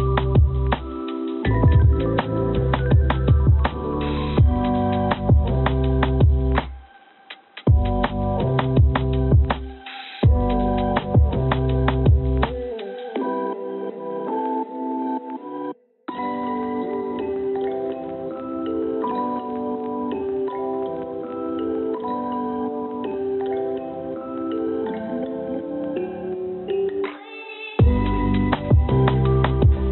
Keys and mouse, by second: 5.1 click, 6.7 3, 7.9 click, 9.0 click, 9.2 click, 10.6 shift+click, 11.5 click, 15.5 click, 16.4 click, 22.5 click, 22.8-27.6 drag, 29.0 Tab.